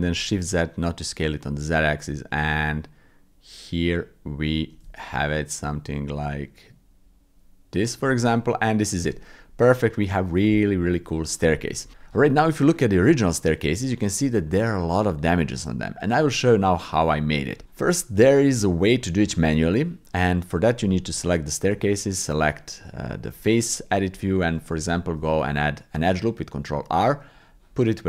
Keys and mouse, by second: 8.2 click, 9.0 Tab, 9.6 click, 10.5 shift+click, 11.3 click, 13.9 shift+middle click, 14.5 middle click, 17.7 middle click, 18.5 shift+middle click, 19.0 click, 20.5 click, 21.1 Tab, 24.8 ctrl+r.